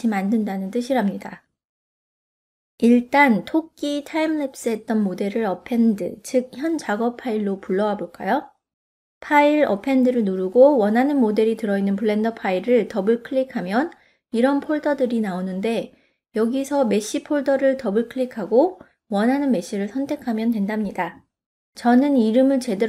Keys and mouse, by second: 0.0 click, 0.3 click, 0.6 ctrl+middle click, 0.9 ctrl+middle click, 1.2 middle click, 1.9 click, 7.5-10.3 drag.